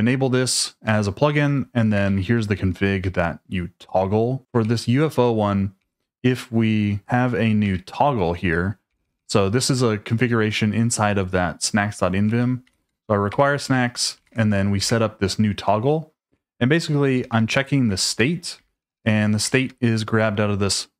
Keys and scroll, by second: 0.6-2.7 typing, 3.0 Escape, 4.5-5.8 typing, 7.0 shift+v, 7.6 Escape, 8.9 k, 9.0 k, 9.1 k, 12.3-19.5 typing, 13.3 Escape.